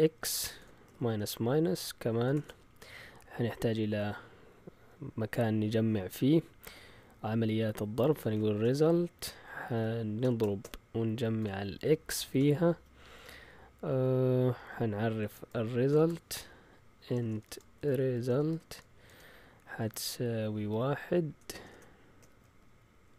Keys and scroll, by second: 0.3-2.8 typing, 7.9-12.3 typing, 14.5 Up, 15.2 Escape, 15.9-19.1 typing, 20.2-23.1 typing.